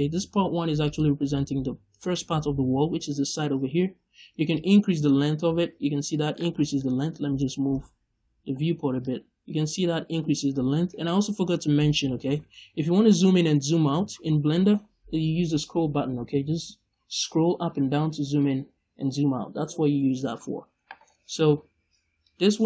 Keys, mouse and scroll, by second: 0.8 click, 4.5-6.2 drag, 6.3 right click, 6.5 scroll down 1, 6.7 middle click, 8.9-10.9 drag, 10.9 right click, 12.9 scroll down 1, 13.1 scroll up 1, 13.3 scroll down 1, 13.4 scroll up 1, 13.6 scroll down 1, 13.8 scroll up 1, 14.0 scroll down 1, 14.2 scroll up 1, 14.3 scroll down 1, 14.5 scroll up 1, 14.6-15.0 scroll down 1, 15.6 scroll up 1, 15.8 scroll down 1, 16.0 scroll up 2, 16.1 scroll down 1, 16.3 scroll up 1, 16.5-16.8 scroll down 2, 16.8-17.5 scroll up 2, 17.5 scroll down 2, 17.7 scroll up 2, 17.9 scroll down 2, 18.0 scroll up 2, 18.2 scroll down 2, 18.3 scroll up 2, 18.5 scroll down 2, 18.6 scroll up 2, 18.8 scroll down 2, 18.9 scroll up 1, 19.5 scroll down 1, 19.6 scroll up 1, 22.2-22.6 drag.